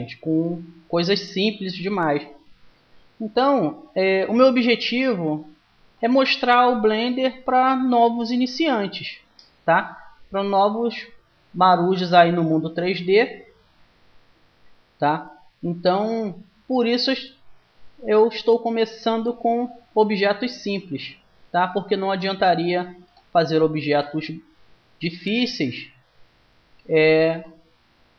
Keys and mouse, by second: 9.0 w, 13.5-15.9 middle drag, 15.9-19.0 drag, 19.7-21.0 drag, 21.0-23.8 middle drag, 23.8-25.3 right drag, 24.8 click, 25.3 middle click, 25.4-26.8 drag, 25.4 right click, 27.2 right click.